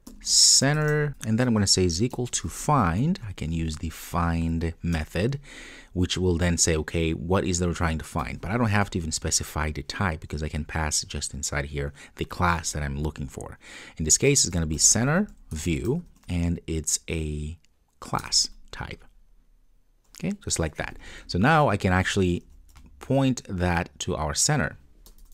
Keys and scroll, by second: 5.0 Return, 15.6 Return, 20.6 Return, 20.6 super+s, 22.4 super+c.